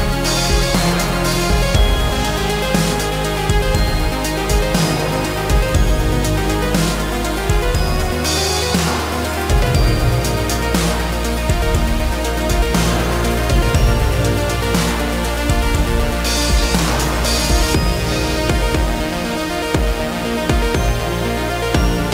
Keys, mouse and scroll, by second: 0.3 alt+t, 13.7 alt+f, 20.7 alt+x.